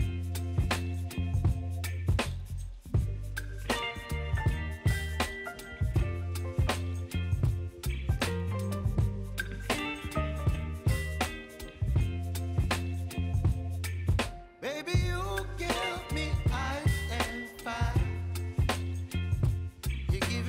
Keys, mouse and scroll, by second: 2.8 space, 4.9 click, 6.9 Return, 8.2 click, 8.6 space, 9.4 click, 9.7 space, 12.8 space, 14.1 click, 14.6 ctrl+c, 15.8 click, 17.4 ctrl+v, 17.9 space.